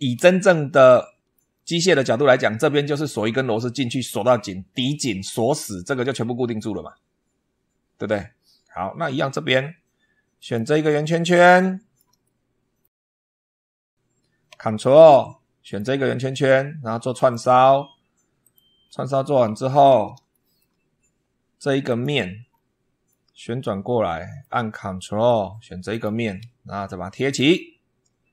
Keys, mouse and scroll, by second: 0.3-1.4 shift+middle drag, 8.0 scroll down 2, 10.2 click, 10.7-11.0 scroll down 2, 11.4 shift+middle click, 12.1 shift+middle click, 13.0 scroll up 2, 15.5 ctrl+click, 17.0 click, 18.2 click, 18.6 scroll down 2, 18.8 scroll up 2, 19.2 scroll down 2, 19.5 scroll up 2, 20.2 shift+middle click, 21.7 click, 22.3 scroll down 2, 22.9-24.4 middle drag, 24.6 scroll up 1, 25.7 ctrl+click, 27.2 click.